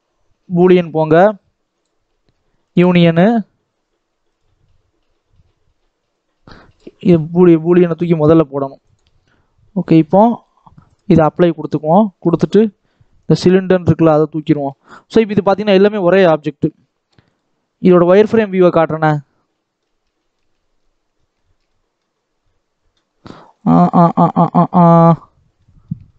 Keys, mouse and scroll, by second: 0.5-2.6 drag, 3.2-4.5 drag, 6.0 click, 8.7-11.8 drag, 12.2 click, 12.8 x, 13.6 scroll down 2, 13.8-14.8 middle drag, 14.8 click, 15.1 scroll up 2, 15.3 Tab, 15.7 alt+a, 16.0-16.6 scroll up 1, 16.6 l, 17.2-18.4 drag, 18.7-20.4 middle drag, 20.4-21.1 scroll up 5, 21.1 scroll down 2, 21.3 shift+middle click, 22.1 scroll up 2, 22.3 middle click, 23.1-23.4 scroll down 4, 23.4 middle click, 24.1-24.7 scroll up 2, 24.7 middle click, 25.5-26.1 middle drag.